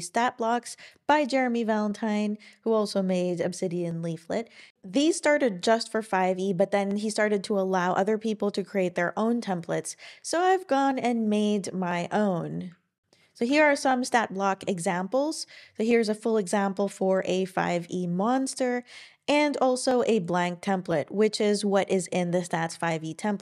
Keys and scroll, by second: 13.0-13.9 typing.